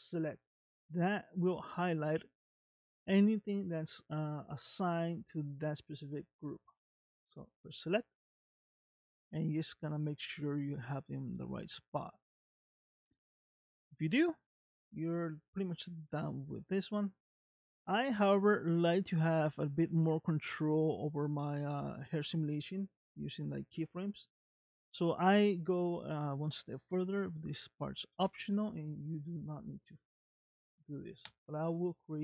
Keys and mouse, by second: 7.7 click, 8.5-12.3 middle drag, 13.1 middle click, 16.4 click, 17.5-18.5 middle drag, 28.2 a.